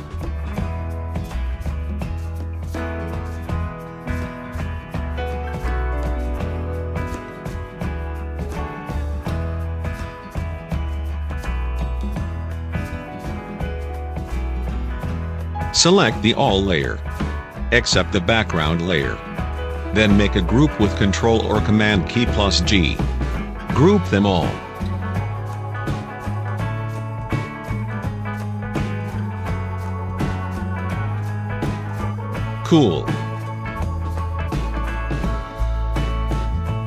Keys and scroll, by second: 3.6 ctrl+t, 19.7 ctrl+g, 22.0-24.5 typing, 26.1 shift+a, 26.9 l, 28.6-30.6 typing, 31.9 Return.